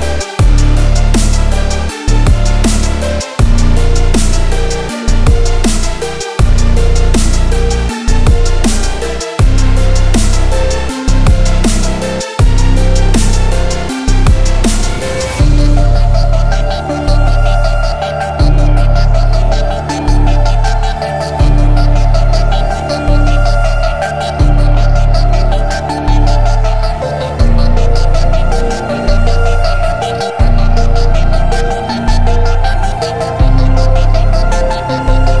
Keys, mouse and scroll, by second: 1.9 alt+click, 7.4-8.1 shift+middle drag, 8.1 alt+click, 13.0-13.3 scroll down 2, 13.3 shift+middle click, 14.0-15.0 scroll up 2, 15.5 middle click, 16.1 Tab, 16.4-17.5 middle drag, 17.5 /, 18.1-18.4 scroll down 5, 18.4-19.0 middle drag, 19.0 scroll down 2, 19.3-20.5 shift+middle drag, 20.5 scroll down 2, 20.7-22.8 shift+middle drag, 22.8 click, 23.2-24.6 middle drag, 24.6 x, 25.4-26.0 middle drag, 26.0 click, 26.7 shift+click, 27.4-28.3 middle drag, 28.3 click, 29.0-29.5 middle drag, 29.5 scroll down 2, 29.7-30.4 middle drag, 30.4 click, 30.7-31.3 shift+middle drag, 31.3 alt+x, 31.9-32.6 scroll down 2, 32.6 click, 33.2-34.9 middle drag, 34.9-35.4 scroll up 2.